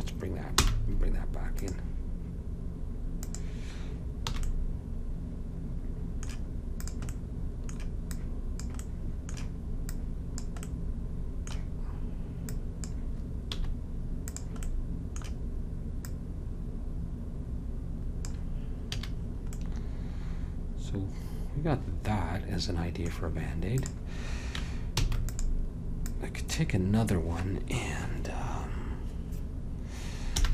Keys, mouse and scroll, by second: 0.7 m, 3.4-5.1 drag, 4.4 a, 4.6 right click, 7.3 middle click, 11.0 click, 12.6-13.7 drag, 13.7 s, 14.9 middle click, 16.1-17.9 drag, 19.1 a, 23.9-25.1 drag, 25.1 shift+d, 26.2-28.1 drag, 30.4 m.